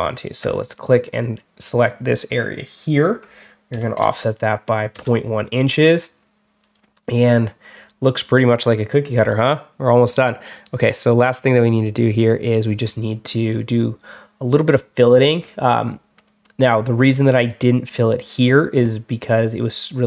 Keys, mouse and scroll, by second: 0.3 click, 11.2 click, 11.9 click, 13.6 scroll down 1.